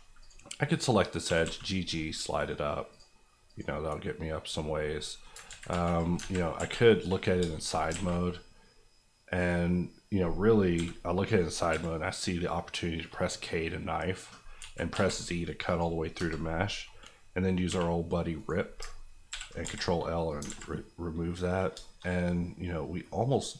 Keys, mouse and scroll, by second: 0.2 click, 1.2 g, 1.4 g, 2.9 click, 4.7 scroll down 1, 4.9 middle click, 5.4 ctrl+z, 6.6 KP_1, 7.4 shift+KP_1, 7.5 shift+middle click, 7.7 scroll up 1, 7.9 alt+a, 8.3-10.7 scroll up 1, 10.7 k, 11.4 click, 11.7 z, 14.9 z, 15.6 click, 16.1 KP_Enter, 17.6 v, 18.3 right click, 18.8 ctrl+right click, 19.3 ctrl+l, 19.6 x, 20.2 click, 20.4 alt+click, 20.4 alt+z, 20.7 middle click, 21.7 shift+middle click, 22.0 middle click, 22.1 scroll down 1, 22.3 middle click, 23.4 click.